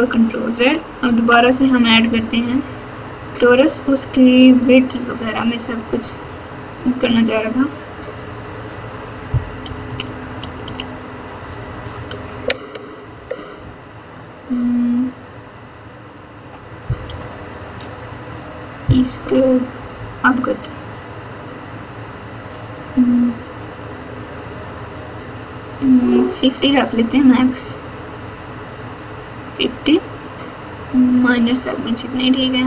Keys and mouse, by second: 1.1 shift+a, 7.9 click, 9.6 KP_2, 9.8 KP_2, 10.6 KP_2, 11.4 KP_Add, 11.6 KP_Add, 11.9 KP_Add, 12.0 KP_Add, 13.1 KP_7, 17.0 KP_9, 19.2 KP_9, 22.9-25.1 drag, 26.2 click, 26.5 click, 26.8 click, 27.0 click, 27.4 click, 27.6 click, 28.0 click, 28.3 click, 28.8 click.